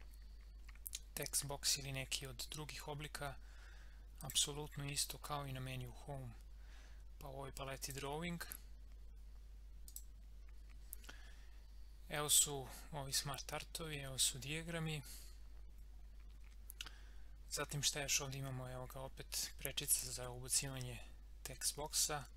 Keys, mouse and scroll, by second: 4.2 click, 7.8 click.